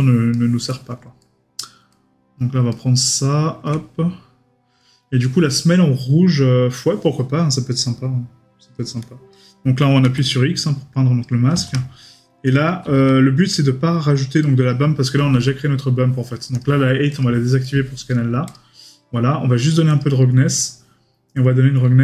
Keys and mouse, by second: 0.3 middle click, 14.4 right click, 17.6 right click.